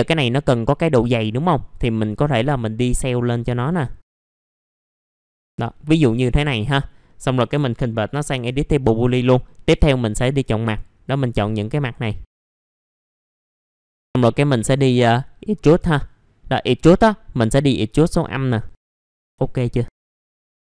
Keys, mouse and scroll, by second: 2.2 click, 4.9 alt+middle click, 5.2 alt+middle click, 5.5 alt+middle click, 9.1 middle click, 10.2 click, 10.6 ctrl+click, 11.0 ctrl+click, 11.4 ctrl+click, 11.8 ctrl+click, 12.2 ctrl+click, 13.4-13.8 scroll up 2, 13.6 alt+middle click, 13.8 right click, 15.8-19.0 drag, 19.0 scroll down 1, 19.5 middle click, 19.9 scroll up 1, 20.0 alt+middle click, 20.3 click, 20.6 F4.